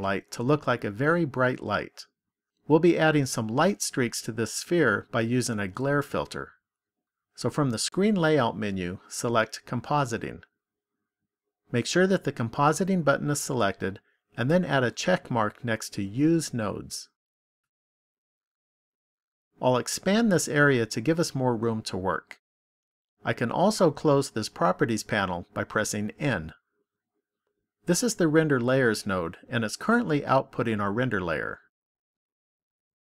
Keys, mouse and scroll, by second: 7.6 click, 16.3 click, 20.1 click, 20.1 scroll up 5.